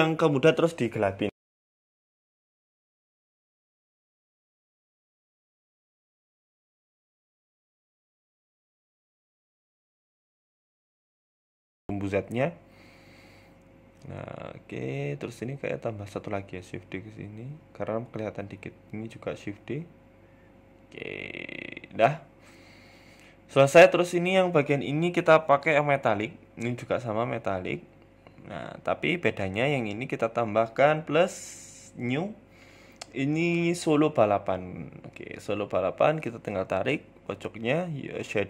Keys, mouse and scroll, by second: 1.1 KP_0, 2.1-2.5 scroll up 2, 2.9 right click, 3.4 shift+right click, 4.0 shift+f, 4.2 y, 4.2 u, 4.7 x, 6.1 g, 6.9 shift+d, 9.0 r, 10.8 r, 13.1-13.5 scroll down 1, 14.1 right click, 15.2 shift+d, 17.9 right click, 18.1 Tab, 18.8 shift+d, 20.5 Tab, 20.7-21.2 scroll down 2, 21.6 scroll up 1, 22.4 shift+middle click, 22.7-23.5 scroll up 5, 23.1 right click, 23.7 click, 24.8 right click, 25.3 click, 26.2 shift+middle click, 26.4-26.8 scroll up 4, 26.5 middle click, 26.8 shift+middle click, 27.2 KP_Decimal, 27.6 scroll down 1, 27.7 middle click, 28.1 shift+middle click, 28.7 Tab, 28.9 middle click, 29.5 right click, 30.3 click, 31.6 click, 35.0 click.